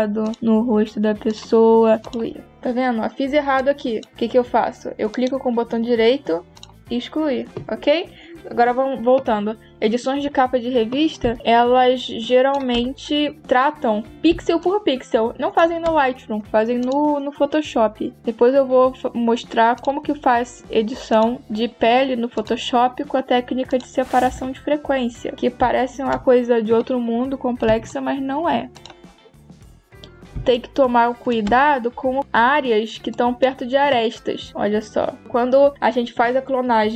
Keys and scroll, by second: 11.1 space, 14.2 space, 25.4 space, 27.5 space, 30.2 space.